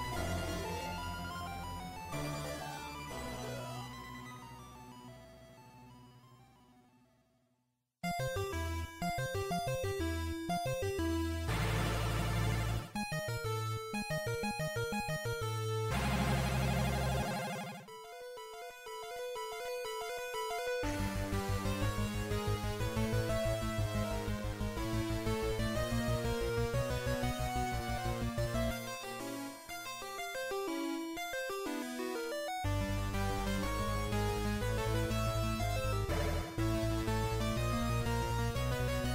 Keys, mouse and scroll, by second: 1.5 ., 3.1 r, 7.3 r, 10.7 ctrl+,, 13.5 click, 19.9 click, 22.1 click, 27.3 scroll up 2, 27.3 a, 28.1 scroll up 2, 28.9-29.7 scroll down 2, 31.7 right click, 32.3-32.9 scroll up 1, 32.9-33.3 scroll up 4, 34.3-35.1 scroll down 3, 34.3 z, 35.5-35.9 scroll down 1, 35.5 z, 36.5 z, 36.7 KP_7, 37.3 scroll down 1, 38.1 a.